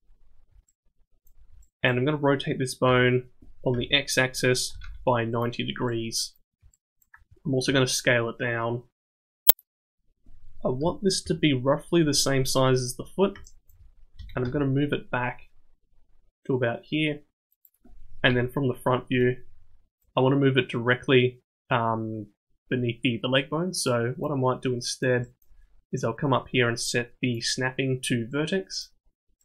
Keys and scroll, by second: 2.8 r, 7.6 s, 10.8 KP_1, 11.2 KP_3, 14.2 g, 18.3 KP_1.